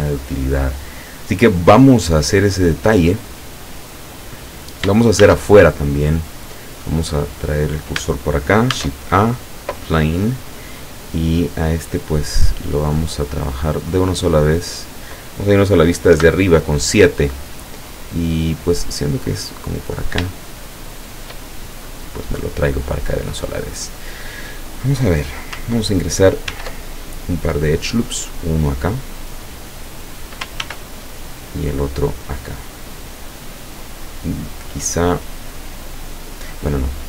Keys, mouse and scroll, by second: 2.0-2.7 scroll down 2, 3.3-4.3 middle drag, 5.2 shift+a, 7.5 click, 8.8 shift+a, 9.7 click, 12.7-14.1 middle drag, 14.7 click, 16.2 KP_7, 17.9 click, 19.3 click, 20.4-21.4 shift+middle drag, 21.9-23.2 drag, 26.6 ctrl+r, 27.1 ctrl+click, 29.7 click, 30.7 ctrl+r, 31.4 click, 34.1 click, 36.6-37.0 drag.